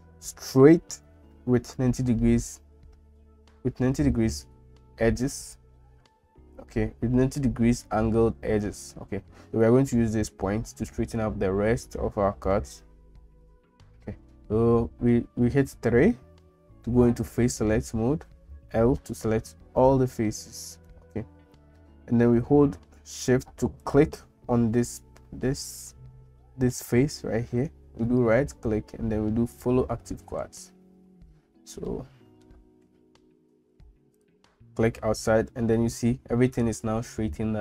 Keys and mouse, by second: 15.8 3, 18.7 l, 28.2-29.8 right drag, 31.9 shift+middle click.